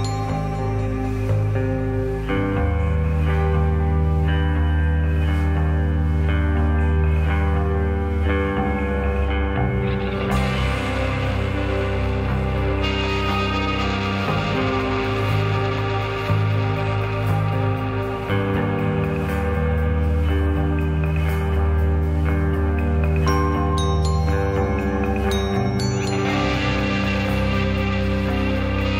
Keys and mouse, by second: 0.8 shift+middle click, 2.0 shift+a, 6.2 shift+middle drag, 10.3 g, 12.3 r, 16.3-16.7 middle drag, 20.2-22.1 middle drag, 22.3-22.8 middle drag, 26.4 g.